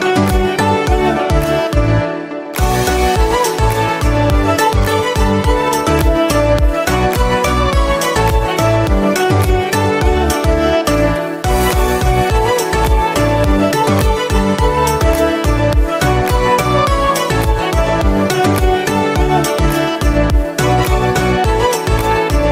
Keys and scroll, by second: 9.9 4, 10.5 Return, 14.1 Escape.